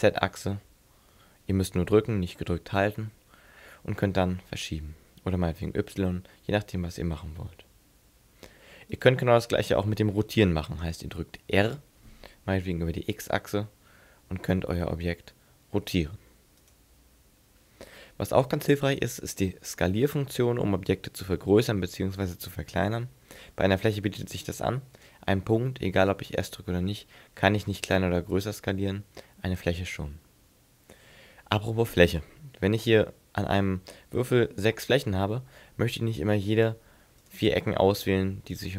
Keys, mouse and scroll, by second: 9.1 right click, 11.7 r, 16.8 right click, 25.0 right click, 26.1 s, 28.4 right click, 36.6 right click, 37.2 shift+right click, 38.0 right click, 38.6 shift+right click.